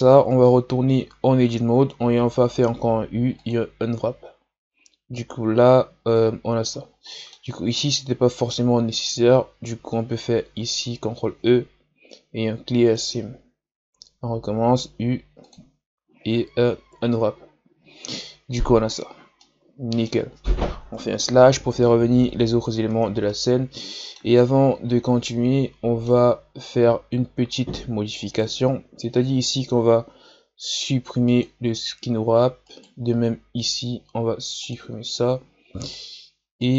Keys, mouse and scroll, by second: 0.0-0.3 scroll up 1, 0.3 Tab, 2.6 u, 4.9-6.1 scroll up 1, 6.2-7.1 scroll up 1, 7.1 middle click, 7.8 right click, 9.0 ctrl+e, 13.9 a, 14.7 u, 19.0-19.4 scroll down 1, 19.4-20.8 middle drag, 20.8 KP_Divide, 22.9 Tab, 23.3-24.7 middle drag, 24.7-25.3 scroll up 2, 25.3-26.4 middle drag, 26.4-27.4 scroll up 1, 27.4-28.3 scroll up 1, 28.3 right click, 32.7 right click, 34.6-35.8 drag, 35.8-36.7 right drag.